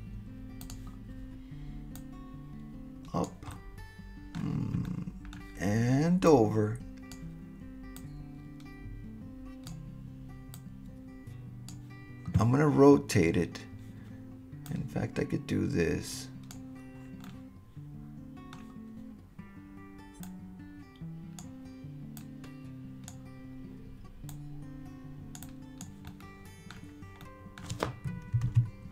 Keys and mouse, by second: 0.7 click, 2.0-3.3 drag, 3.5-4.4 middle drag, 4.9-5.3 middle drag, 6.3 click, 8.0-9.7 drag, 10.5-11.7 drag, 14.7-16.5 drag, 17.2-18.6 middle drag, 20.2-21.4 drag, 22.2 click, 24.3-25.4 drag, 25.6 click, 26.1-26.7 middle drag, 27.2-28.6 middle drag, 28.5 super+z.